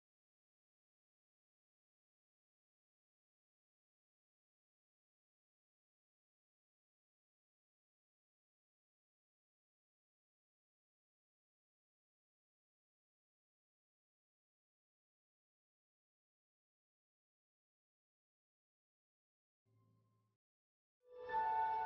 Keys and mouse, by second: 0.1 middle click, 0.8-2.2 middle drag, 2.2 g, 4.2 s, 14.3-16.7 drag, 16.5 middle click, 16.7-18.5 middle drag, 18.5 e, 20.0 shift+s.